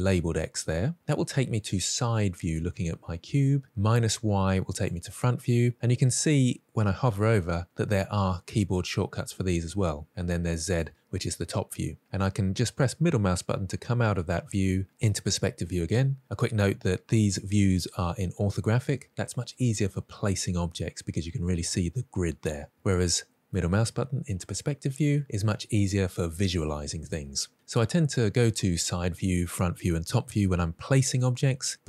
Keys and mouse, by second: 0.6 click, 4.6 click, 10.5 click, 12.6-14.7 middle drag, 17.1 click, 23.5-25.2 middle drag.